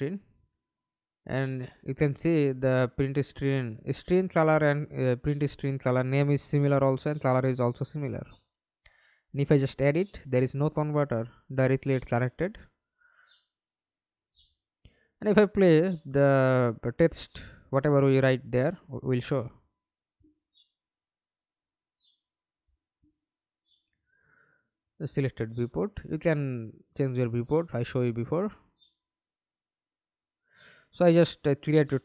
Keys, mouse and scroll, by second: 15.3 middle click, 16.1 F11, 16.6 alt+p, 19.6 middle click, 20.3 Escape, 20.5 middle click, 21.2 F11, 25.8 Escape, 31.7-32.0 typing.